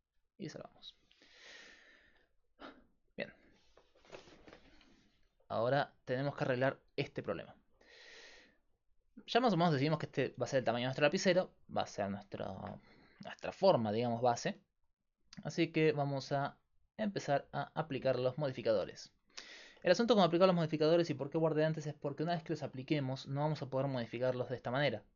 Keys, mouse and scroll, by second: 0.0-1.0 drag, 1.5-17.1 middle drag, 17.1-20.5 drag, 19.3-23.8 middle drag, 23.8-25.1 drag.